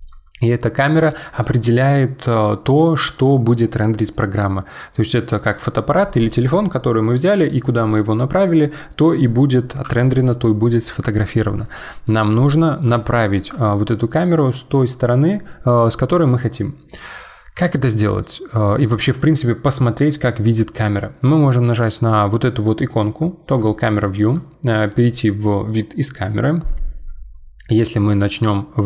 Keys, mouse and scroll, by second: 0.0 click, 0.5-3.6 middle drag, 12.0-12.8 middle drag, 12.8 scroll down 1, 13.1-16.2 shift+middle drag, 19.7 click, 23.5 click, 23.5 click, 24.3 click, 27.8-28.8 middle drag.